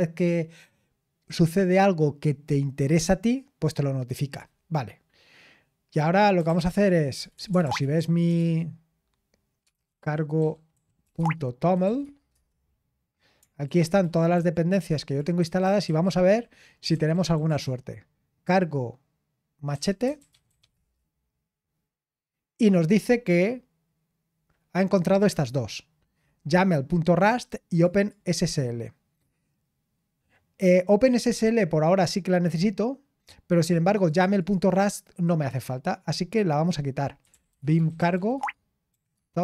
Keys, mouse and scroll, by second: 10.7-17.3 typing, 11.1 Tab, 12.3 Return, 19.3-21.2 typing, 27.7 click, 34.1 click, 39.1-39.4 typing.